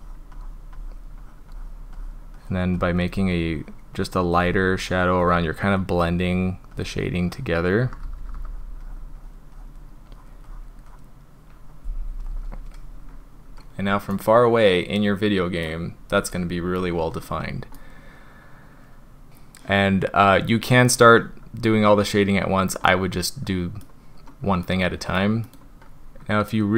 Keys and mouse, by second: 0.0 drag, 0.4 drag, 0.8 drag, 1.2 drag, 1.5 drag, 2.0 drag, 2.4 drag, 2.8 drag, 3.2 drag, 3.6 drag, 4.0 drag, 4.4 drag, 4.8 drag, 5.2 drag, 5.6 drag, 6.0-6.4 drag, 6.8 drag, 7.1-7.5 drag, 7.8 [, 8.0 [, 8.2 [, 8.3 [, 8.5 drag, 8.8 drag, 9.2 drag, 9.6 drag, 10.1 drag, 10.5 drag, 10.9 click, 14.1-15.7 middle drag, 17.8-19.3 middle drag, 22.9-23.8 middle drag, 24.6 middle click, 25.4 middle click.